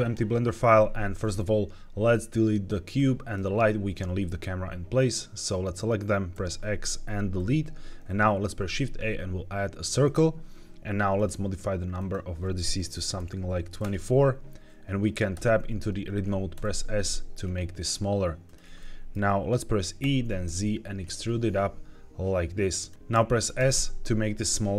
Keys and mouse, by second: 3.0 drag, 6.2 x, 8.3 shift+a, 11.1 click, 11.9-13.7 drag, 15.3 Tab, 16.5 s, 18.3 click, 18.6 shift+middle click, 19.9 e, 20.3 z, 22.7 click, 23.5 s.